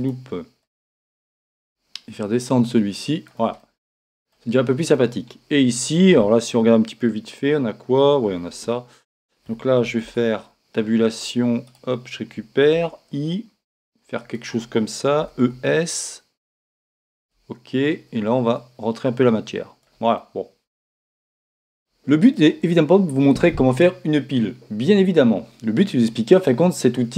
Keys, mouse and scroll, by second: 0.0 ctrl+r, 0.7-3.4 drag, 3.6-7.8 middle drag, 10.4 ctrl+Tab, 11.2 ctrl+Tab, 11.6-13.7 right drag, 12.7 i, 14.3-16.2 drag, 15.2 e, 17.2-20.4 drag, 20.2-24.6 middle drag, 21.3 Tab.